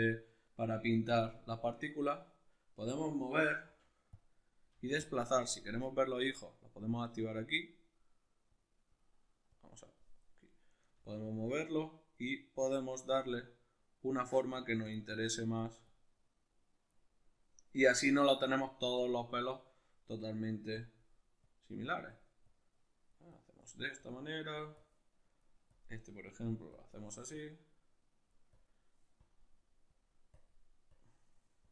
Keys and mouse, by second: 1.1 click, 3.6 f, 4.2 click, 4.7 f, 5.0 click, 5.7-11.3 drag, 11.7-14.9 drag, 14.5 f, 15.1-18.5 drag, 18.5-20.1 shift+middle drag, 20.1-31.7 drag.